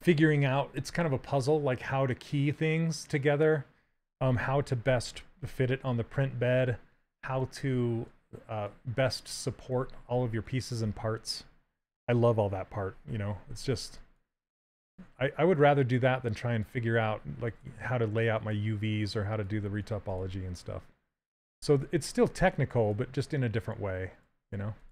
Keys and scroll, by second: 4.4 s, 13.6 s, 22.4 s.